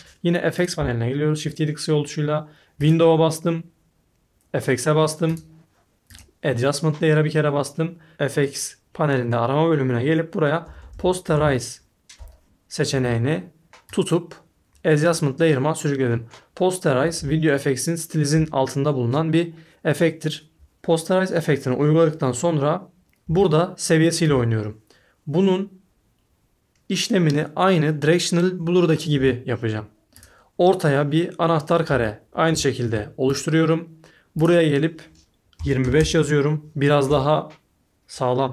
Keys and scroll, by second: 0.7 shift+7, 10.4-12.5 typing, 35.3-36.3 typing.